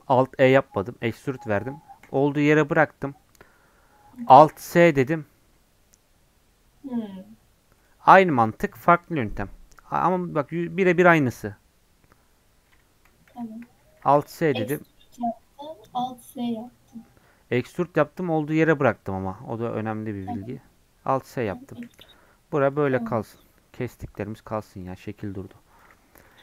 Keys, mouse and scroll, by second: 11.5-12.5 scroll down 2, 12.5-13.3 scroll up 2, 13.3 ctrl+z, 14.0 alt+s, 16.9-17.3 scroll up 2, 17.3 scroll down 1, 19.7-20.5 scroll up 2, 20.5 scroll down 2, 21.5 middle click, 21.8 scroll down 1, 22.0 Tab, 22.9 scroll down 1, 23.1 middle click, 23.4 scroll up 1, 24.4 middle click, 24.8 click, 25.1 scroll up 1, 25.7 click.